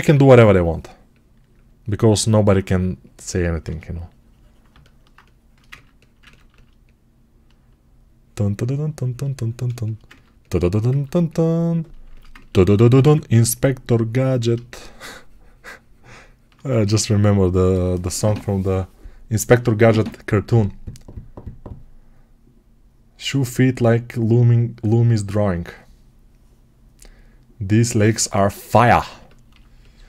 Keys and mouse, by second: 0.0 p, 3.0-9.6 alt+drag, 9.6-11.9 alt+shift+right drag, 11.9-30.0 alt+shift+drag, 12.9 2.